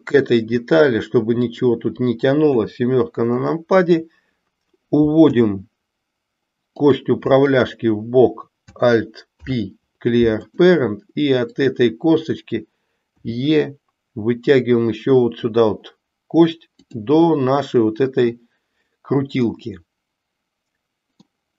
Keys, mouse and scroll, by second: 5.3 e, 9.4 alt+p, 11.5 click, 13.3 e, 17.3-18.4 middle drag, 19.5-21.4 middle drag.